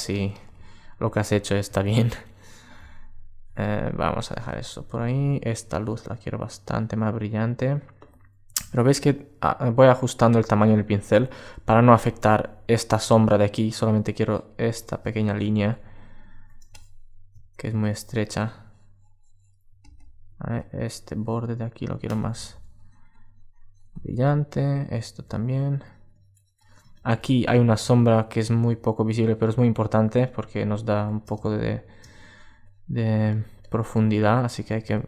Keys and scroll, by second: 15.5 alt+space, 19.3 alt+space, 26.5 super+space, 29.6 super+space.